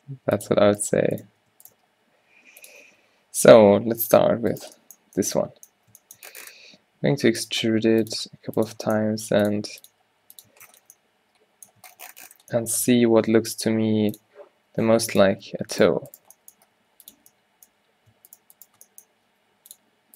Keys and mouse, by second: 1.8 g, 2.7 click, 3.1 o, 4.1 click, 4.6 middle click, 5.8 click, 6.8-10.0 typing, 10.6 Tab, 13.1 Tab, 13.3 s, 15.8-17.1 drag, 16.8 s, 19.1 shift+right click, 19.3 r.